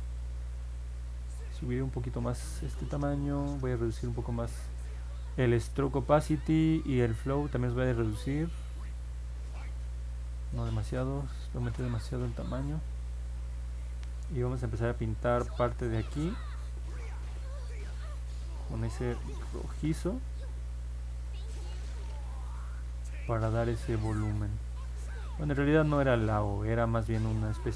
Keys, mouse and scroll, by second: 15.4 click, 16.1 click, 16.8 click, 17.4 click, 18.0 click, 18.6 click, 19.3 click, 20.0 click, 20.6 click, 21.1 click, 22.7 click, 23.2 click, 23.6 click, 24.1 click, 24.6 click, 25.0 click, 25.8 click, 26.4 click, 26.9 click, 27.4 click.